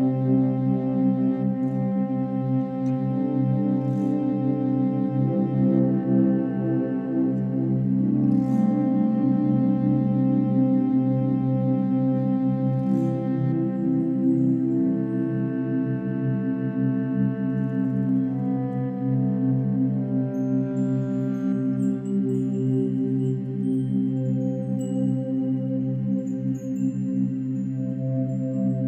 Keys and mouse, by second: 2.3 ctrl+s, 2.6 ctrl+s, 3.2-8.0 drag, 9.7 click, 10.5 click, 11.0 click, 13.8 alt+click, 15.6 click, 16.9 click, 17.7-20.9 drag, 20.9 g, 23.6 Escape, 24.4-26.2 alt+shift+drag, 26.2 g.